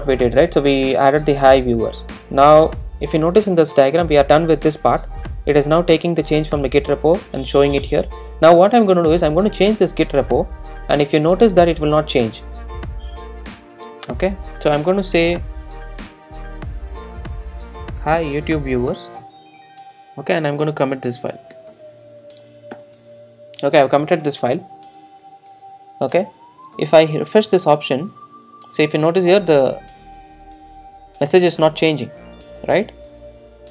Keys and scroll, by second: 19.8 super+s.